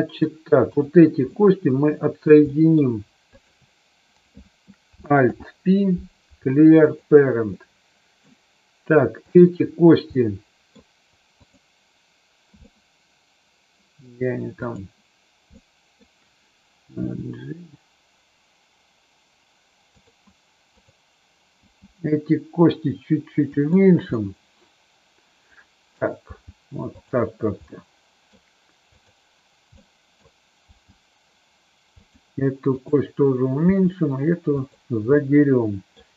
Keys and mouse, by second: 0.6 click, 1.2-2.3 middle drag, 2.5 middle click, 5.2 alt+p, 7.5 middle click, 9.3 click, 10.1 middle click, 11.3 click, 12.6-14.0 middle drag, 14.6 click, 15.6 middle click, 17.0 g, 19.8 click, 21.6 g, 23.5 click, 24.1-26.0 middle drag, 26.2 g, 27.6 middle click, 29.0 click, 29.7 middle click, 30.6 g, 33.6 g, 34.6 click, 35.1 middle click.